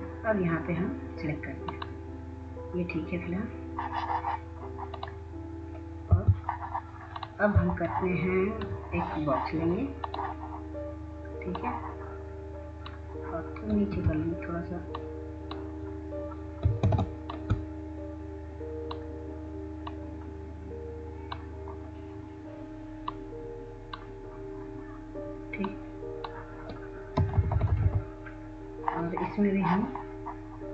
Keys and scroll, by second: 8.0 F4, 9.4 F4, 12.4 F2, 18.8 ctrl+space, 29.1 Down, 29.3 Down, 29.5 Down, 29.6 Down, 29.7 Down.